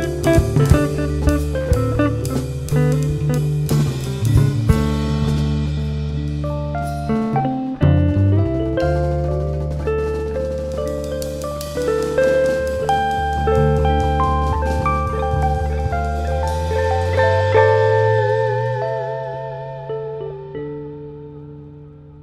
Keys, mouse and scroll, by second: 0.2 scroll down 1, 0.4 `, 0.9-1.5 scroll up 2, 1.0 Tab, 1.5 scroll down 1, 1.8 `, 2.4 ctrl+r, 3.0 click, 3.2 scroll down 1, 3.3 `, 4.6 `, 5.5 KP_1, 6.1 `, 7.4 alt+a, 7.9 KP_1, 9.0 scroll up 1, 12.0 b, 13.6 s, 13.7-14.2 scroll down 1, 14.2 scroll up 1, 14.4 s, 14.9-15.7 scroll up 1, 15.7-16.7 shift+right drag, 16.7 b, 17.0 KP_7, 18.0-18.8 scroll up 1, 20.1 s.